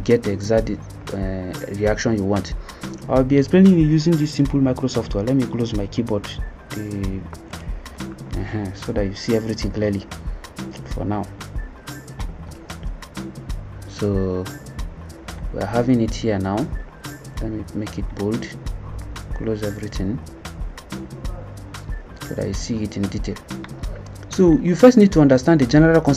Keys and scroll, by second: 7.4 ctrl+Tab.